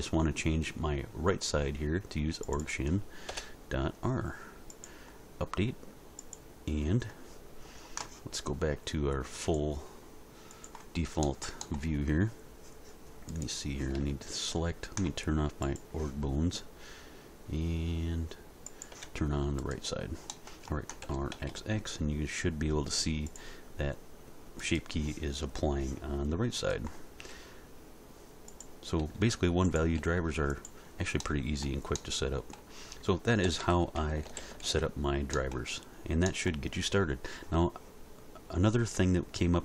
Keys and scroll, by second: 3.3 BackSpace, 21.0 r, 21.3 x, 27.3 r, 29.0 r, 33.5 a, 34.3 alt+r, 34.4 alt+g, 34.6 alt+s.